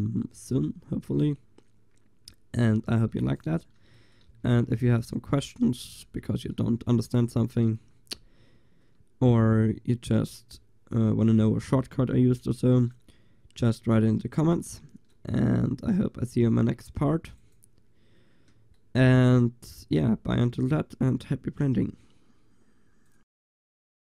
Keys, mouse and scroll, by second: 2.9 Tab, 4.3 a, 4.9 ctrl+s, 5.7 Tab, 12.7 ctrl+s, 16.4 r.